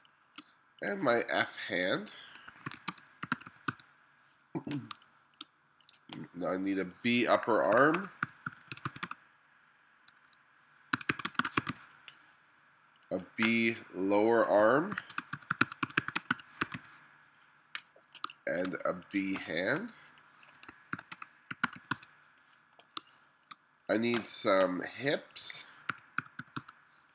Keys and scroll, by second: 2.7-5.0 typing, 7.5-12.2 typing, 14.7-18.3 typing, 21.0-23.0 typing, 25.7-27.1 typing.